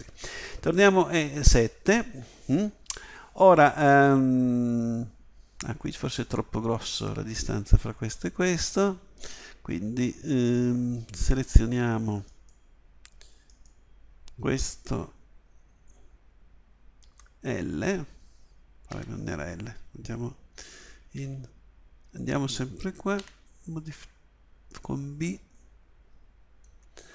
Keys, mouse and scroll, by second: 0.8 KP_7, 2.9 a, 17.0 l, 18.9 a, 21.2 z, 23.2 b.